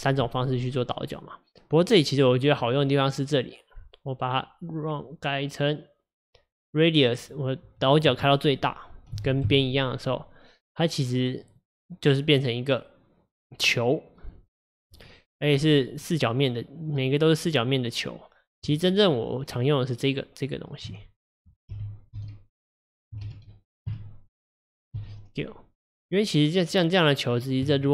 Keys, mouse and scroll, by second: 7.3-10.3 drag, 11.5 click, 12.5-15.6 middle drag, 15.8-18.7 middle drag, 18.7 Tab, 21.4 click, 21.8 g, 23.3 ctrl+z, 24.0 Tab, 25.0 s, 27.7 Tab.